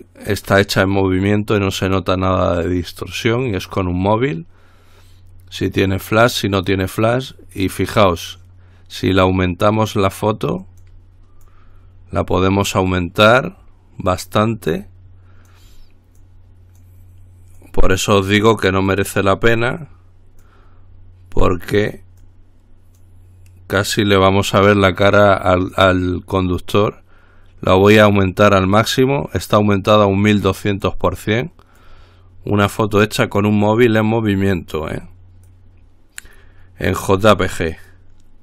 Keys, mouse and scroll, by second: 9.3-11.6 drag, 11.7-13.5 drag, 13.5-14.9 drag, 15.0-16.2 drag, 16.4-17.5 drag, 17.8-19.0 drag, 19.2-20.4 drag, 20.7-22.2 drag, 22.5-23.7 drag, 26.0-28.5 drag, 29.7-31.6 drag, 32.0-33.7 drag, 33.8-35.5 drag, 35.7-36.9 drag, 37.4-38.4 drag.